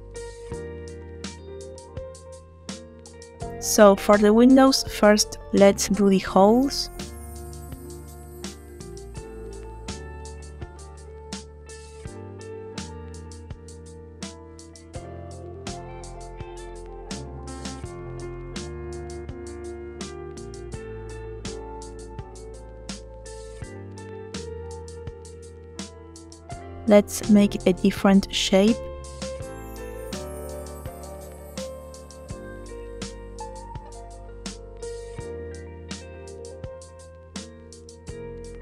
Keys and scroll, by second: 3.4 space, 7.1 ctrl+shift+a, 10.6 s, 20.5 s, 25.6 shift+d, 26.5 Escape, 30.3 s, 30.4 z, 34.5 s, 34.7 y.